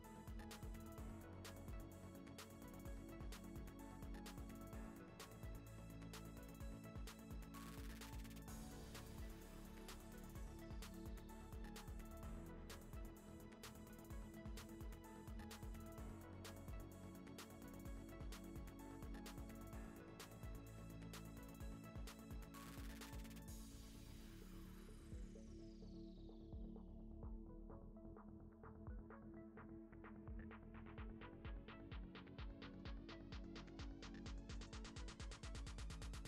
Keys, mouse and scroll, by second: 0.0 shift+right click, 0.2-2.2 typing, 0.7 middle click, 3.0 click, 3.8 KP_1, 4.4 click, 5.1 middle click, 5.4 KP_0, 5.9-7.4 drag, 7.5 click, 7.7 click, 8.1-8.9 drag, 9.4 ctrl+s, 9.5 click, 11.1 click, 11.3 ctrl+s, 11.5 click, 12.0 click, 13.2 click, 13.5 click, 14.3 click, 14.5 click, 15.9 click, 16.5 click, 18.7 click, 18.8 click, 18.8 click, 23.8 click, 23.9 click, 24.2 click, 24.5 drag, 26.8 ctrl+c, 27.5 click, 28.1 ctrl+s, 28.6 click, 28.9-29.4 drag, 30.2 click, 30.4 click, 30.5 click, 31.4 click, 32.3 click, 33.5 click, 33.7 click, 34.5 ctrl+s, 34.9 scroll up 1, 35.9 click, 36.2 click.